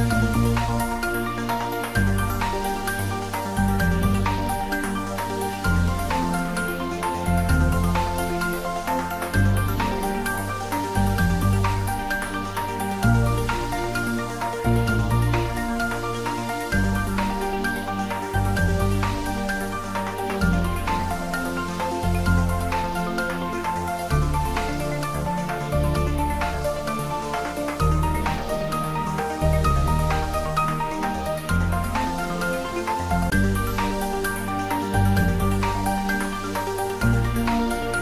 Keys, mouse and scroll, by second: 4.6 3, 12.7 click, 15.9 click, 19.9-20.2 scroll down 1, 22.0-23.3 scroll down 1, 23.9-27.0 middle drag, 27.0 click, 30.7-35.2 drag, 37.1 click.